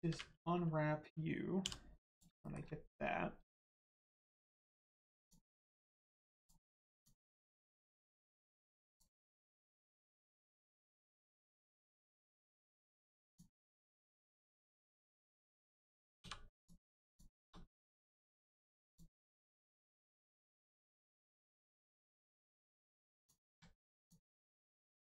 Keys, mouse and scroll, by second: 1.5 g, 2.1 click, 2.3 shift+middle click, 5.1 click, 6.3 click, 8.1 right click, 8.8 click, 10.3 right click, 13.2 click, 15.3 click, 16.1 2, 16.6 click, 17.0 shift+click, 18.8 click, 20.2 shift+click, 22.6 click, 23.9 shift+click.